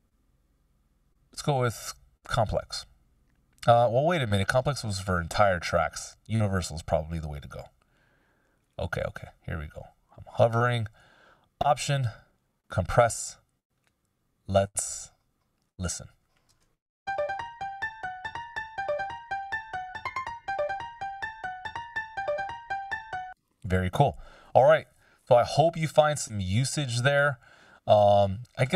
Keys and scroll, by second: 16.7 shift+space, 22.7 space, 23.9 super+z.